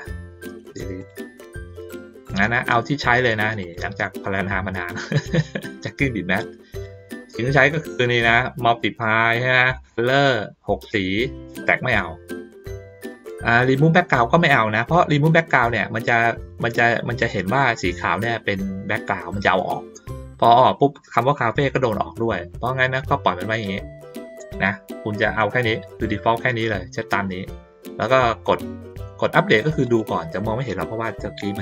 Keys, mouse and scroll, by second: 1.0 click, 1.6 middle click, 2.2 click, 3.6 click, 5.1 click, 6.4-6.8 drag, 7.2 ctrl+middle click, 11.6 click, 29.8 click.